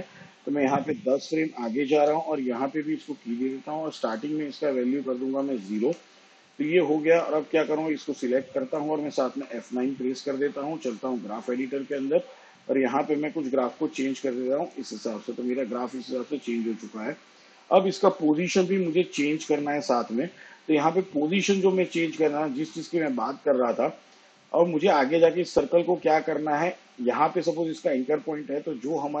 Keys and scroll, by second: 3.1 shift+Page_Down, 7.5 0, 11.0 F9.